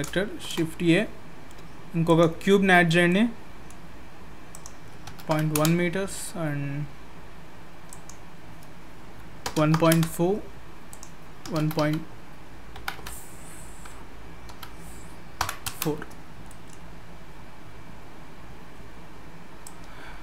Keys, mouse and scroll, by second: 0.4 shift+a, 2.8-3.4 scroll up 3, 3.1 middle click, 4.5 click, 7.9 click, 10.9 click, 16.4 scroll down 1, 16.5 middle click, 19.6 click.